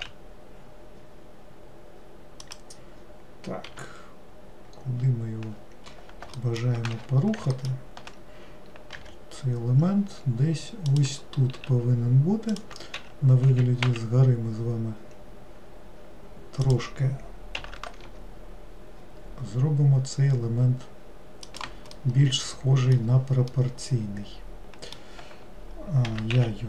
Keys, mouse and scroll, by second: 7.6 alt+middle click, 9.1 g, 22.1-26.2 middle drag, 26.2 g.